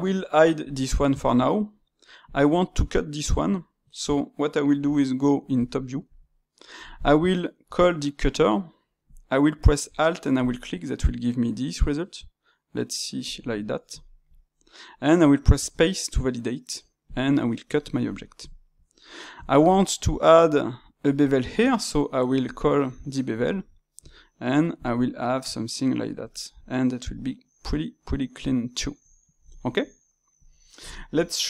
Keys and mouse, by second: 0.6-2.2 drag, 5.5 KP_7, 6.3-7.6 shift+middle drag, 7.6 space, 13.4-22.4 middle drag, 25.0-27.1 middle drag, 27.3-31.4 middle drag.